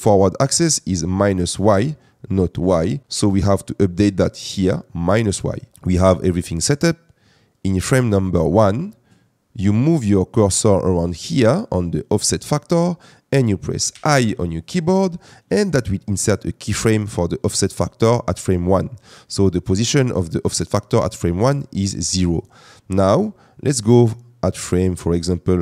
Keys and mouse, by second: 5.1 click, 13.9 i.